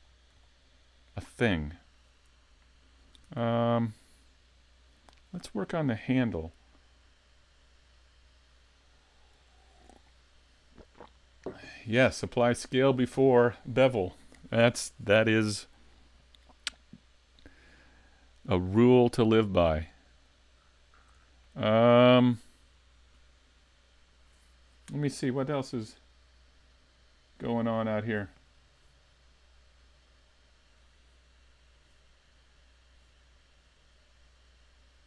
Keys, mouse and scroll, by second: 0.0-1.4 scroll up 2, 0.4 shift+middle click, 1.5-2.0 scroll down 1, 3.3 s, 4.0 middle click, 16.7 middle click, 20.7-21.2 scroll up 2, 21.2 shift+middle click, 21.7 middle click.